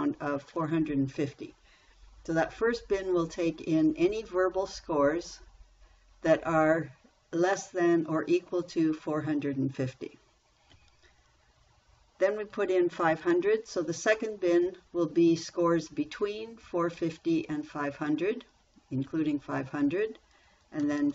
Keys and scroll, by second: 0.0-0.3 typing, 11.2 Down, 13.0 5, 13.5 0, 19.5 Down.